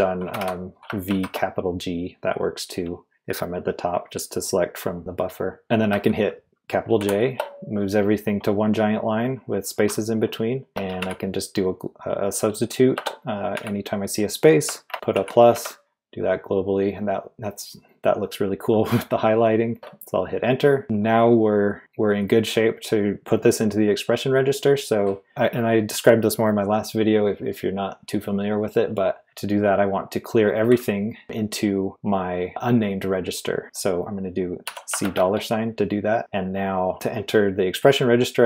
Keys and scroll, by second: 0.0-1.6 typing, 7.0 shift+j, 10.6-11.4 typing, 12.9-13.5 typing, 14.9-16.0 typing, 19.7 Return, 22.4 typing, 34.6-35.0 typing.